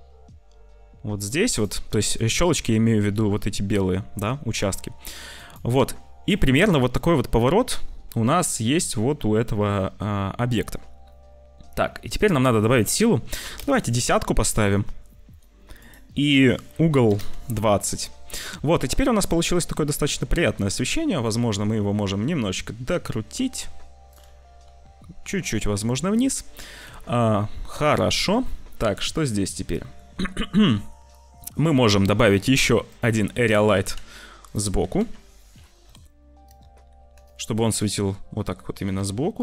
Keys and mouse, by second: 2.2 shift+click, 3.7 r, 12.1-13.6 drag, 15.7-17.2 drag, 20.0 r, 24.4 r, 26.9 ctrl+s, 28.7 click, 29.6 click, 31.6 shift+a, 33.7 g, 34.7 r, 36.5 r, 37.7 click, 38.7 g.